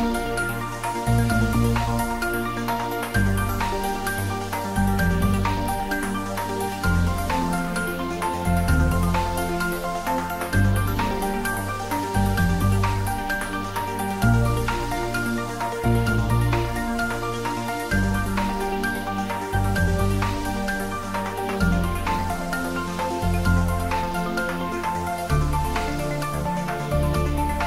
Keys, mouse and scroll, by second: 0.4-1.7 drag, 3.6-6.8 drag, 7.0-8.1 scroll down 1, 10.9-11.5 middle drag, 12.3 click, 13.5-14.9 typing, 15.7 Return, 17.5 click, 19.8-20.4 typing, 21.5 Return, 23.3-23.8 scroll down 1.